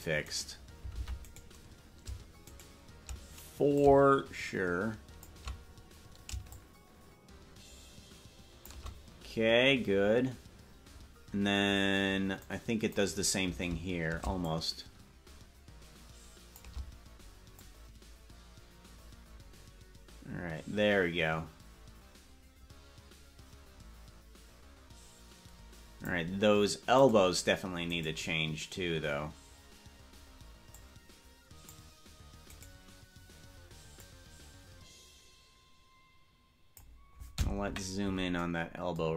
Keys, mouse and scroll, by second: 0.7 right click, 1.3 ctrl+Tab, 1.5 right click, 2.7 shift+right click, 3.9-5.4 shift+drag, 6.6-8.8 shift+drag, 12.5 click, 14.5-16.7 shift+drag, 17.8-26.3 drag, 27.3 right click, 28.1 right click, 30.8-31.8 drag, 32.7 right click, 34.2-37.0 drag, 37.7 KP_Decimal.